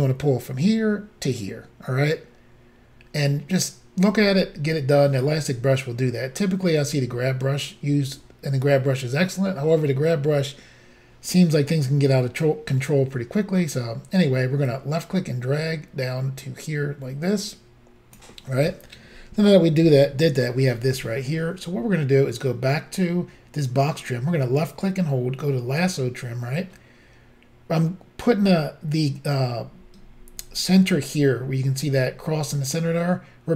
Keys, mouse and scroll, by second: 14.7 click, 24.2 click.